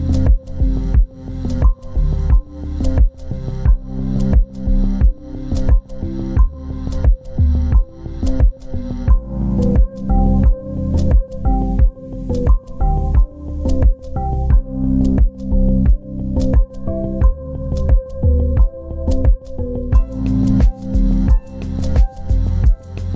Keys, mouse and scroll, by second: 0.3 scroll down 1, 0.6 z, 0.8 ctrl+space, 6.1 right click, 11.0 double click, 18.9 double click, 22.2 scroll up 1, 22.5 scroll down 1.